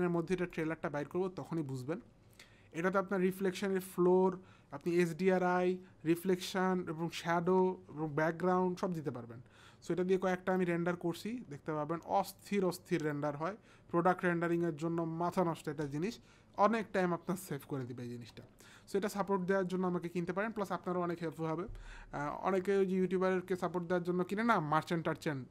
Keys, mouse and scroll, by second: 1.7 click, 10.4 click, 12.3 click.